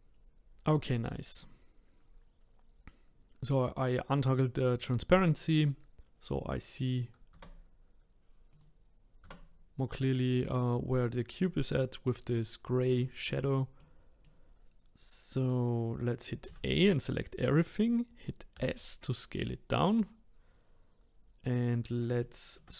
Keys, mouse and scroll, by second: 0.1-0.4 scroll up 3, 7.3 Tab, 8.5 click, 9.2 Tab, 13.8-15.4 middle drag, 15.4 click, 16.5 a, 18.5 s, 22.2 shift+middle click, 22.7 scroll up 1.